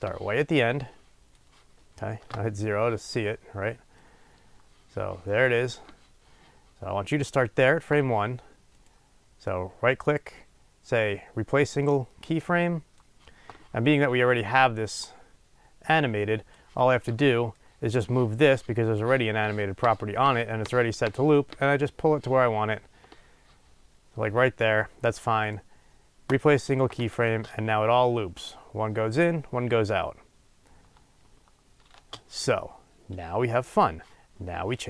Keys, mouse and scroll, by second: 2.3 KP_0, 13.0-15.0 right drag, 15.0-26.3 drag, 26.3-34.8 right drag, 27.4 space, 32.0 space.